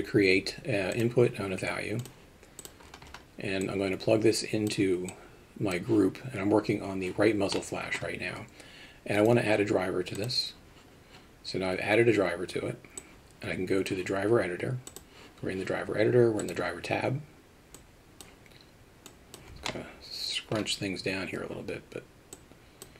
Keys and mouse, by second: 3.7-4.7 drag, 5.1 click, 7.6 middle click, 9.2-10.8 right drag, 13.0 click, 14.9 click, 17.8 click, 19.1 click, 19.7 middle click, 22.4 click.